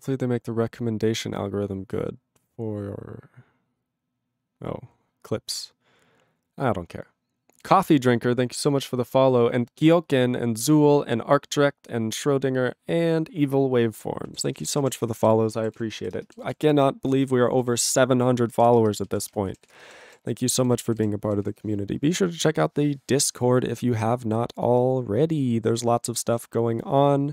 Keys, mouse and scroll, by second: 14.3 ctrl+a, 14.4 ctrl+space, 14.5 ctrl+e, 14.6 ctrl+g, 14.7 ctrl+space, 14.8 ctrl+a, 15.0 ctrl+p, 15.2 ctrl+g, 15.2 ctrl+e, 15.8 ctrl+s, 16.0 ctrl+b, 16.2 ctrl+space, 16.6 ctrl+alt+f, 16.7 ctrl+g, 17.2 ctrl+n, 17.4 ctrl+n, 17.6 ctrl+n, 17.7 ctrl+n, 17.8 ctrl+n, 17.9 ctrl+space, 18.3 ctrl+p, 18.5 ctrl+e, 18.5 ctrl+g, 18.8 ctrl+space, 19.2 ctrl+alt+b, 19.3 ctrl+g, 19.7 ctrl+s, 19.8 ctrl+space, 20.2 ctrl+alt+f, 20.3 ctrl+g, 20.6 ctrl+n, 20.7 ctrl+n, 21.0 ctrl+n, 21.4 ctrl+s.